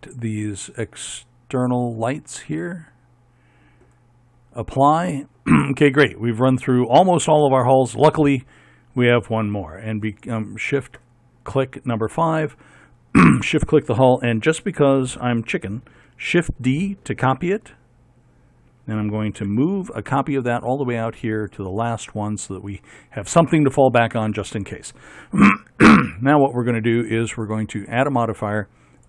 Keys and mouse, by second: 5.0-6.9 drag, 10.3-12.5 drag, 12.9-16.2 right drag, 16.2 shift+d, 19.5 m, 22.6-24.9 right drag.